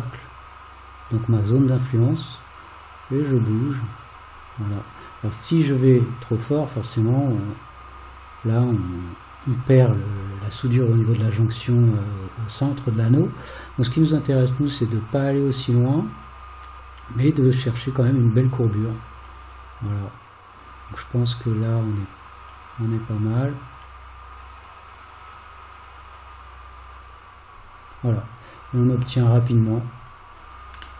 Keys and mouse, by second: 28.3 click, 30.1 click.